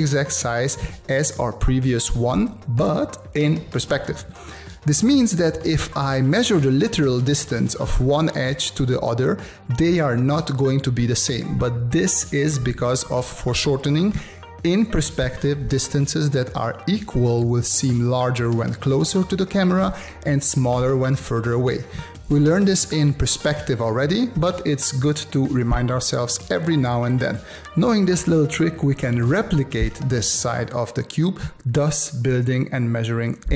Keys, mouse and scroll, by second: 5.8 space, 6.5 click, 9.7 v, 13.6 space, 22.6 space, 24.9 space, 27.9 space, 30.6 space, 31.9 click, 32.8 space.